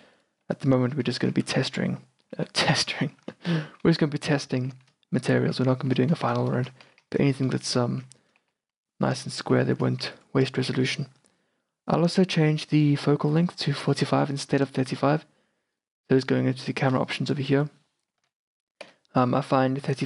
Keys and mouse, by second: 0.0 KP_0, 1.4 shift+f, 9.5 shift+f, 12.2-20.0 drag.